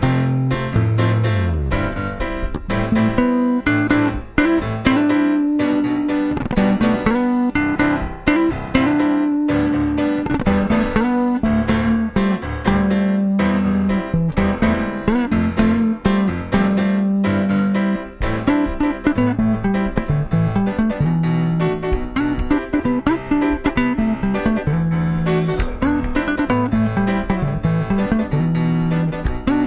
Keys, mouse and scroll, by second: 1.7-4.3 drag, 5.5-7.4 drag, 8.1-13.3 drag, 15.5 middle click, 16.4-18.1 drag, 19.0-20.8 drag, 21.9-23.5 drag, 24.5-26.4 drag, 26.3 typing, 28.4-29.6 drag.